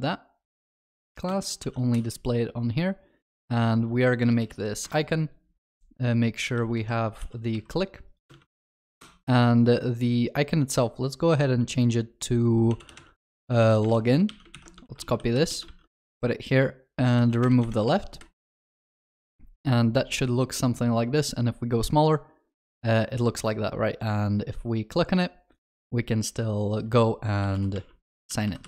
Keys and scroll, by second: 1.6 ctrl+s, 4.9 Return, 7.1 ctrl+w, 7.5 ctrl+c, 14.9 ctrl+c, 17.7 ctrl+w.